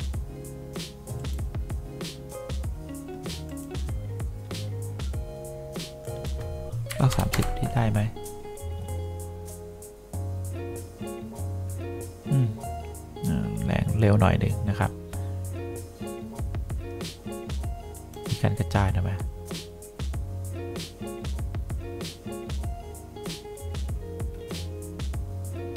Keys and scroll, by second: 7.0 3, 7.4 0, 7.4 Return.